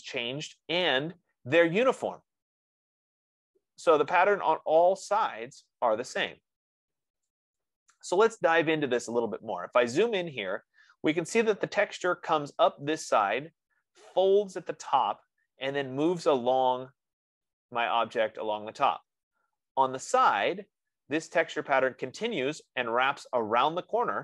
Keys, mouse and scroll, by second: 4.6 right click, 8.5 right click, 9.2-9.7 scroll, 10.3 middle click, 11.5 middle click, 20.5-24.2 middle drag.